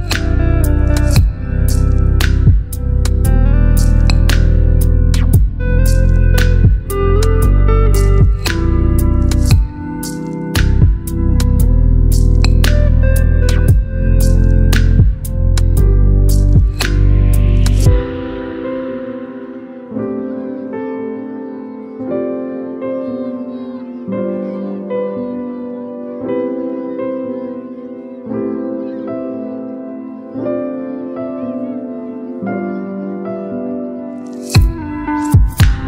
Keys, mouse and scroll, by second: 3.5 click, 7.3 click, 8.8 right click, 10.0 click, 16.8-21.0 drag, 23.7-26.4 drag, 27.1 ctrl+t, 28.9-30.2 drag.